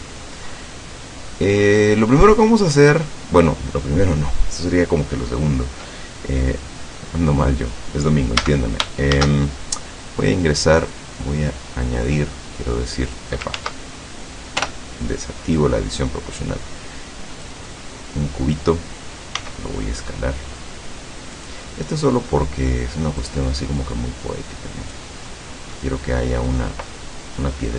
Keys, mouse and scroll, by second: 0.5-0.9 scroll up 1, 0.9-1.7 middle drag, 1.9-2.7 scroll down 2, 2.7 click, 6.5 scroll down 2, 7.0 click, 8.4 a, 9.2 shift+a, 10.8 click, 12.1-13.4 drag, 13.5 ctrl+z, 14.6 o, 15.5-17.7 drag, 17.7-18.7 middle drag, 19.5 s, 21.4 click, 21.7-22.5 middle drag, 23.3-25.2 drag, 25.3 middle click, 26.1-26.4 scroll up 1.